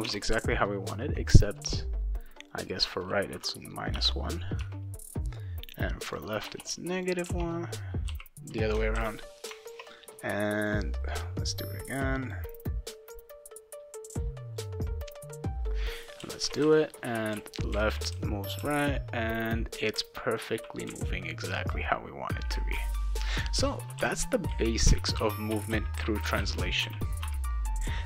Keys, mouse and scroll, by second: 0.0 alt+Tab, 2.5 click, 3.9 -, 4.6 1, 6.0 click, 6.4 BackSpace, 6.9 click, 7.2 scroll down 2, 7.3 BackSpace, 8.1 ;, 8.9 ctrl+s, 10.4 click, 10.6 click, 11.1 click, 12.2 click, 14.5 click, 15.6 click, 16.2-20.9 typing, 22.7-27.3 typing.